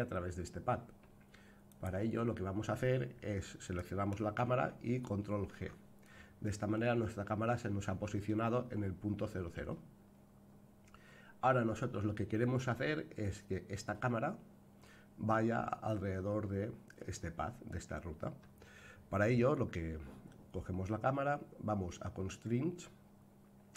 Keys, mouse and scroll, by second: 1.6 click, 5.4 alt+g, 8.6-9.6 scroll up 5, 11.2-12.5 scroll down 2.